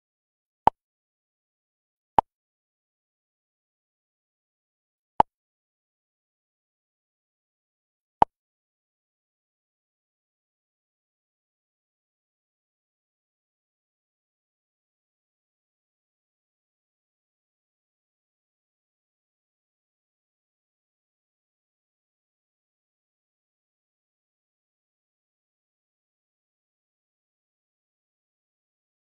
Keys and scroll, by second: 9.9 ctrl+a, 13.1 space, 13.5 space, 15.0 space, 17.5 space, 26.7 space, 28.0 space.